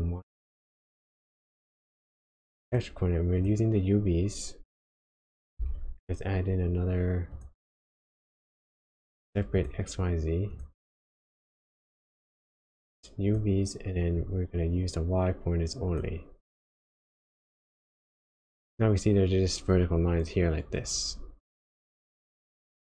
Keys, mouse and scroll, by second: 5.5 shift+a, 11.6 click, 12.7 click, 14.1 click, 17.0 click.